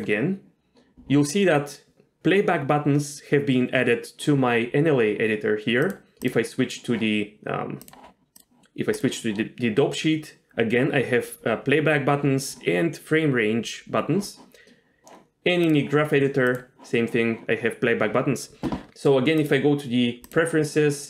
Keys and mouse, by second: 9.0 click, 19.4-20.4 drag.